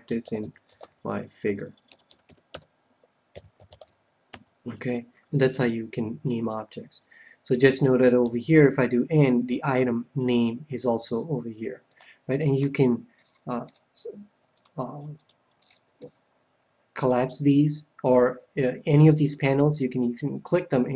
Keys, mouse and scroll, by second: 8.2 n, 11.8-14.1 drag, 13.1-17.9 middle drag, 14.5-16.8 drag, 17.8 click, 19.7-20.9 drag.